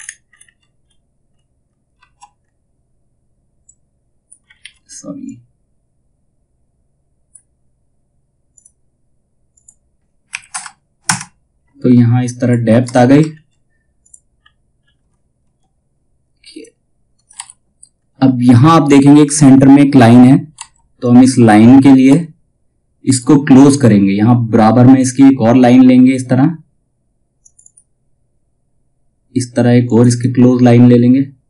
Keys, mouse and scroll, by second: 0.3-1.5 scroll up 1, 3.2 click, 4.1 ctrl+z, 4.8-8.1 drag, 11.9 click, 12.3 space, 12.8 alt+scroll down 1, 13.5 click, 13.9-14.3 scroll down 1, 16.0 click, 16.9 shift+F2, 17.5-19.2 scroll down 1, 20.1 F2, 20.5 click, 21.6 space, 22.5-24.4 scroll up 1, 26.9 click, 29.4 click.